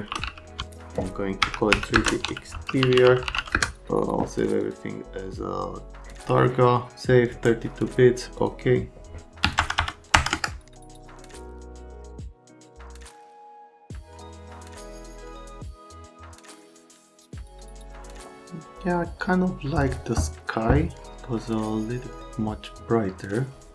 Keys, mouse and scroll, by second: 0.0-3.9 typing, 9.4 KP_1, 9.5 KP_0, 10.3 Return, 10.8 click, 12.0 click.